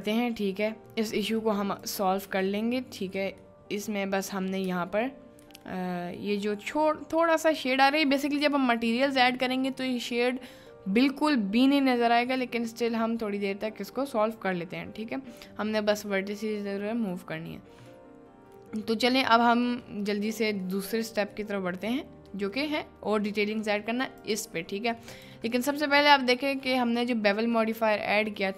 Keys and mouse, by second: 1.5 middle click, 1.8 click, 2.3 Tab, 3.0 1, 3.6 middle click, 4.6 Tab, 4.6 1, 5.6 middle click, 6.3-6.9 middle drag, 7.2-7.6 middle drag, 10.3 middle click, 12.5-13.0 middle drag, 15.3-17.2 middle drag, 18.0 middle click, 18.4 middle click, 19.1 middle click, 19.8-20.3 middle drag, 20.7 middle click, 21.5 middle click, 22.4 middle click, 23.6 middle click, 24.2 click, 25.0 middle click, 25.7 shift+middle click, 26.2-26.7 shift+middle drag, 26.9-28.4 middle drag.